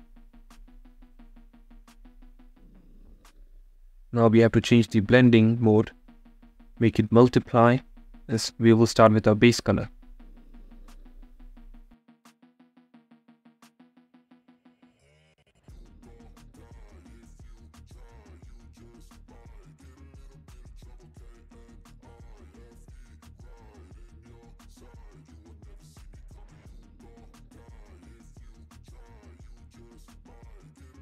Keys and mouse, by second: 4.1 click, 6.2-8.0 drag, 11.3-13.2 drag, 13.5 click, 23.0 click, 23.5-26.1 middle drag, 27.1 middle click.